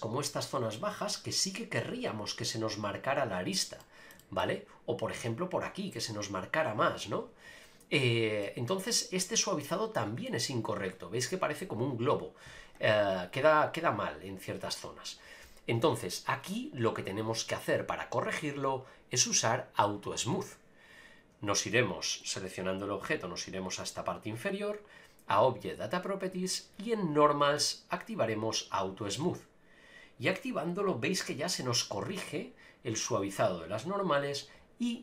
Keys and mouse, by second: 1.9 a, 3.8 shift+middle drag, 4.2 middle click, 8.4 middle click, 22.3 click, 29.2 click, 30.7 click, 31.1 click.